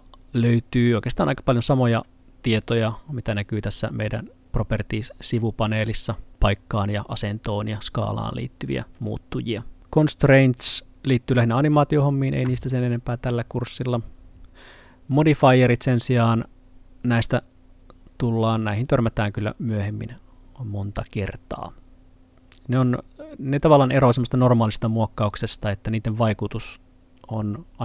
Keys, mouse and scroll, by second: 10.3 click, 15.9 click.